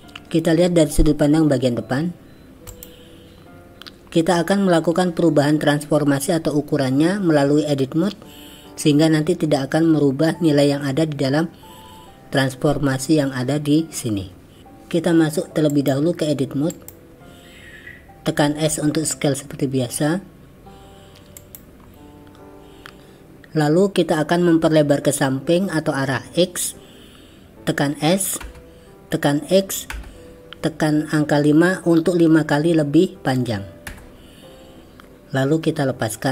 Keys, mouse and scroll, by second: 2.7 click, 15.7-16.9 drag, 18.7 s, 28.4 s.